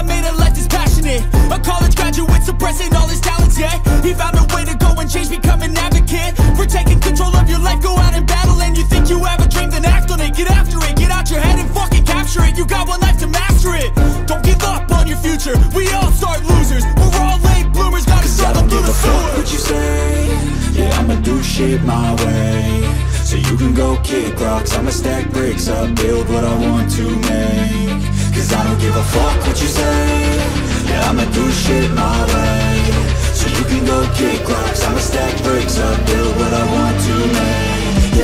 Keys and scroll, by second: 3.3 ctrl+t, 7.5 Return, 11.1 ctrl+z, 11.9 ctrl+z, 13.0 ctrl+z, 14.8 ctrl+alt+z, 26.3-27.5 typing, 30.4 ctrl+t, 32.8 Return.